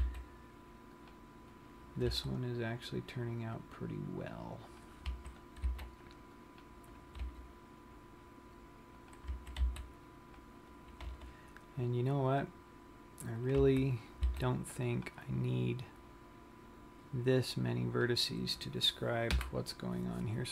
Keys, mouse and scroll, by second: 0.2 click, 0.2 a, 0.5 c, 2.6 g, 5.4 click, 5.6 a, 6.3 c, 7.8 right click, 7.9 g, 9.8 click, 10.0 a, 10.3 c, 11.8 g, 13.9 click, 14.2 a, 14.9 c, 19.0 right click, 19.9 Delete.